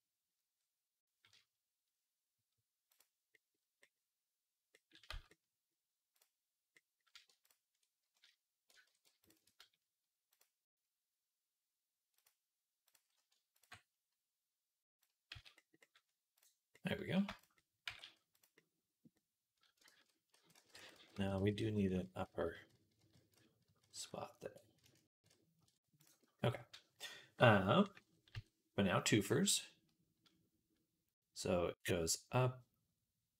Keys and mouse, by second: 3.4 click, 3.7 right click, 4.6-6.0 right drag, 4.9 z, 6.6 right click, 8.7 ctrl+z, 15.2 z, 16.2-17.7 right drag, 17.4 z, 17.7 g, 19.7 ctrl+z, 20.8-24.3 ctrl+z, 24.3-31.2 right drag, 24.9 ctrl+shift+z, 25.8 click, 25.8 middle click, 28.2 KP_3.